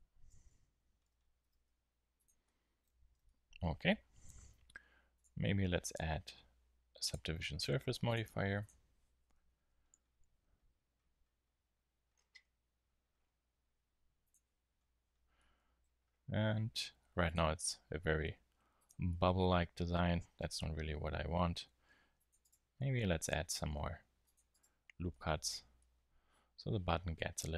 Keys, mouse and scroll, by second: 0.3 KP_1, 1.4 s, 2.2 click, 2.6 middle click, 2.8 z, 9.9 t, 14.2-15.9 drag, 14.7 t, 15.9 middle click, 16.8 ctrl+r, 17.2-18.2 drag, 21.9 ctrl+r, 22.5-25.4 drag, 23.7 ctrl+r, 25.5 Tab.